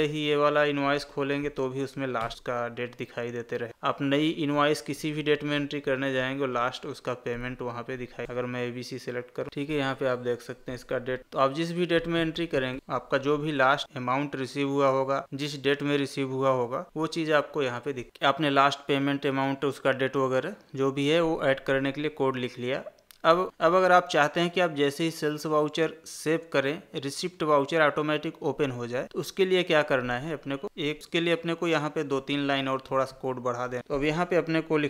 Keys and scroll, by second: 3.9 Escape.